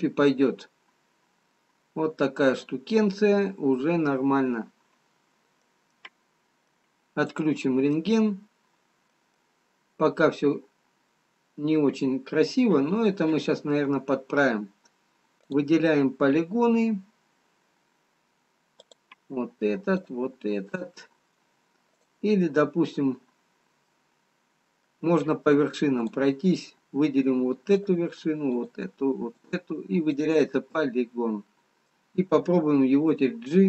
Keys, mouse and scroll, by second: 0.0 middle click, 6.4 middle click, 8.3 middle click, 8.3 click, 9.9 middle click, 16.2 click, 19.3 click, 20.4 shift+click, 24.9 middle click, 27.0 click, 28.0 shift+click, 28.7 click, 30.1 shift+click, 31.0 middle click.